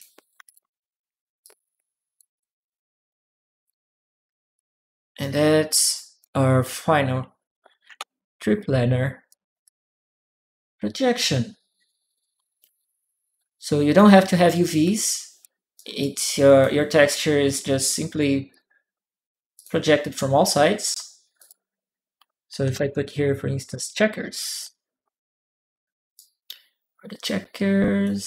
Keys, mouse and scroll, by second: 0.2 a, 0.2 click, 0.3 a, 0.4 a, 1.2 click, 2.2-3.4 drag, 4.3 click, 5.7 click, 5.7 right click, 6.0 right click, 7.7 shift+p, 9.1 click, 9.4-13.7 drag, 14.7 right click, 15.5 right click, 16.1 click, 17.7 right click, 18.3 click, 19.3 click, 21.1 click, 22.2-25.0 typing, 25.9-27.0 right drag, 27.8 click.